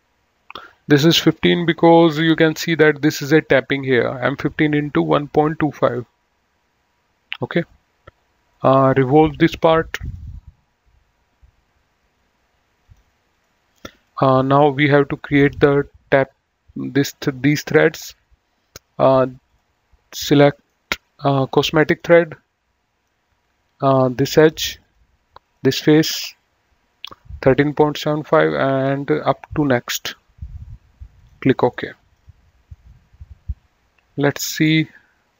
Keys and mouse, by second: 1.6 click, 5.9 click, 8.8 click, 10.3 click, 13.0 click, 14.2 middle click, 15.2 click, 19.7 click, 20.3 middle click, 22.1 click, 25.0 click, 28.2 click, 29.5 click, 31.4 click, 31.9 middle click, 32.8 right click.